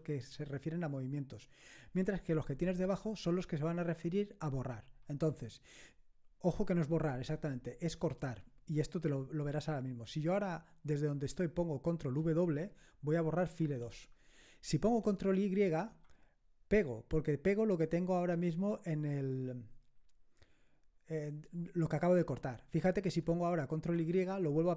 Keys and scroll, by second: 13.6 ctrl+w, 15.9 ctrl+y, 22.3 End, 23.9 ctrl+y.